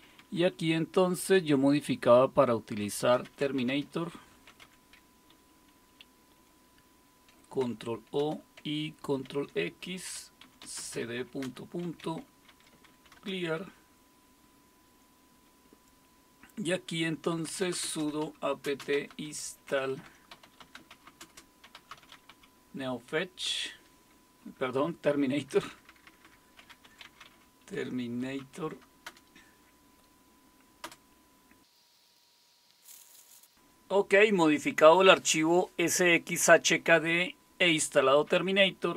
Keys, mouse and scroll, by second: 0.0 Down, 0.2 Down, 0.3 Down, 0.5 Down, 1.4 Right, 2.8-13.4 typing, 5.3 Delete, 5.5 Delete, 5.7 Delete, 5.9 Delete, 8.2 Return, 17.1-22.8 typing, 23.5 Tab, 24.4-29.1 typing, 30.8 Return, 31.8 click, 31.9 Left, 32.4 Left, 32.4 Right.